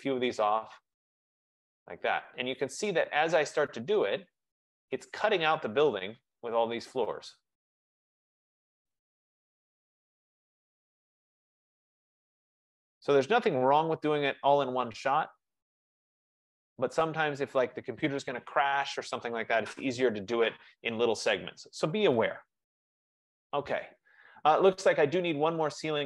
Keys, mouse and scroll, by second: 0.0 click, 3.1 click, 3.3 click, 5.8 click, 9.2 click, 9.5 F15, 12.0 click, 17.0 click.